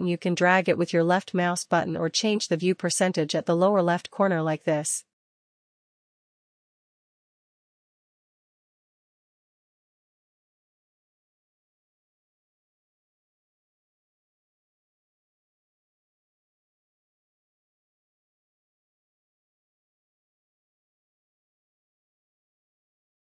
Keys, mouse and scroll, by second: 0.7 click, 2.9 ctrl++, 3.9 ctrl++, 4.5 ctrl++, 6.1 ctrl++, 7.0 ctrl+-, 7.4 ctrl+-, 7.8 ctrl+-, 13.8 ctrl++, 14.0 ctrl++, 14.4 ctrl++, 21.1-23.3 drag.